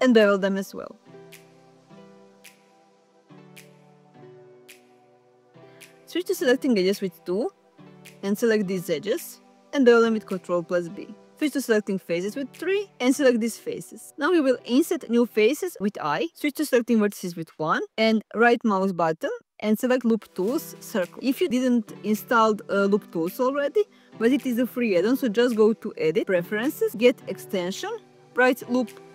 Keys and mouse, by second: 0.0 shift+click, 0.7 shift+click, 2.6 ctrl+shift+b, 5.8 click, 6.1 2, 6.7 shift+click, 7.7 ctrl+b, 10.1 click, 11.1 ctrl+z, 11.9 click, 12.8 shift+click, 13.8 i, 18.0 1, 18.8-20.9 right drag, 22.0-23.4 drag.